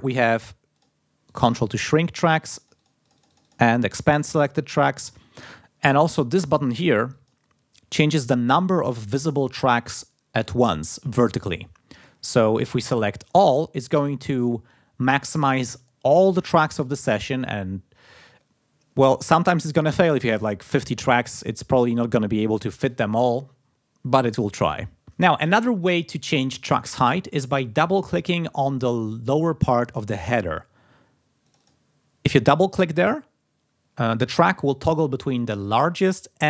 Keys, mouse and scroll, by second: 0.7 click, 1.2 click, 2.4-3.6 drag, 7.0 click, 13.2 click, 31.4 click, 36.3 click.